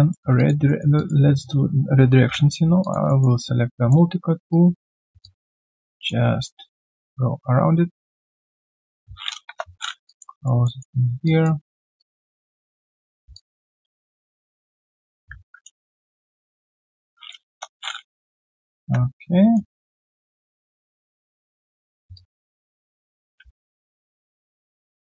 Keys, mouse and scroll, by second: 0.4 alt+click, 0.6 alt+middle click, 0.9 alt+click, 2.1 ctrl+shift+x, 2.8 alt+click, 3.1 alt+middle click, 4.5 shift+click, 5.2 alt+click, 5.9 alt+middle click, 6.6 shift+click, 9.5 Return, 10.0 alt+click, 10.3 alt+right click, 10.6 alt+middle click, 12.0 shift+click, 13.3 shift+click, 15.4 ctrl+z, 15.4 shift+click, 15.8 ctrl+z, 15.8 shift+click, 17.4 Return, 21.1 shift+click, 22.1 shift+click, 22.9 alt+middle click, 23.6 shift+click.